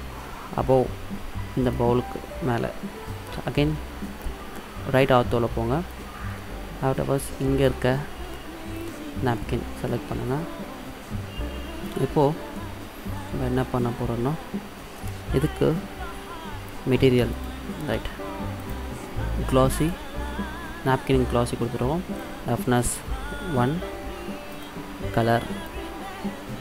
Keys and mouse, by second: 3.5 KP_3, 5.0-6.0 middle drag, 6.0-7.9 drag, 9.4 middle drag, 10.1-11.3 middle drag, 11.4 middle click, 11.9 middle click, 12.2 middle click, 12.9-13.4 middle drag, 17.5-20.6 drag, 22.2-24.1 drag, 24.6-26.5 drag.